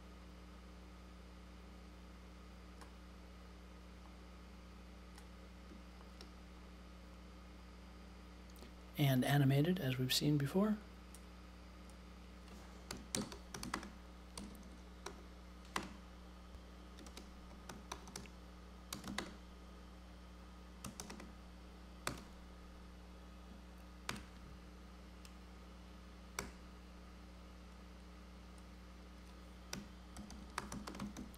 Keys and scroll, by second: 12.6-15.7 typing, 16.8-19.5 typing, 20.5-22.6 typing, 24.0 super+j, 26.3 t, 29.4-31.3 typing.